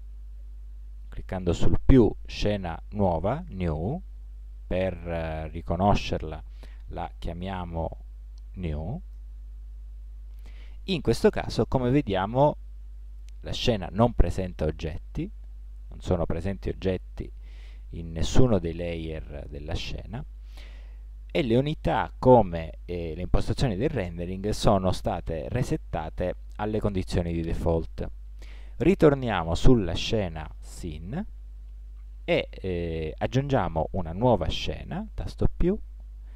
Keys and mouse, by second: 5.8-7.6 drag, 12.2 middle click.